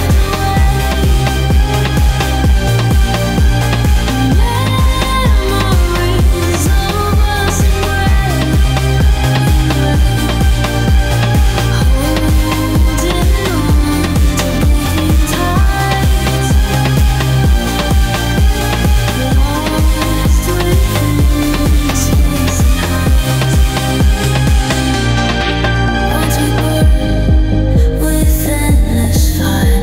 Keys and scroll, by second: 13.9 Delete, 16.3 ctrl+z.